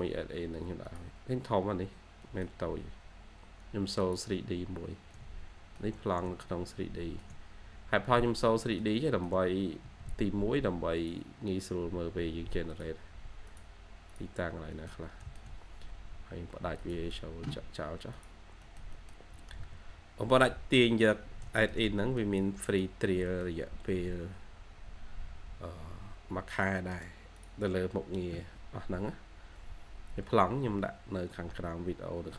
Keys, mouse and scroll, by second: 1.1-1.6 scroll down 1, 2.1 middle click, 5.0 middle click, 6.1 middle click, 7.2 shift+scroll down 1, 7.4-7.8 scroll up 1, 8.4-8.9 shift+scroll up 1, 8.9 shift+middle click, 9.7 typing, 14.3 scroll down 1, 14.6 middle click, 15.4-16.4 scroll down 1, 18.4 scroll up 1, 18.5 middle click, 19.8-20.2 scroll down 1, 20.0-20.7 typing, 20.7 middle click, 21.9 middle click, 23.2 middle click, 26.8 right click.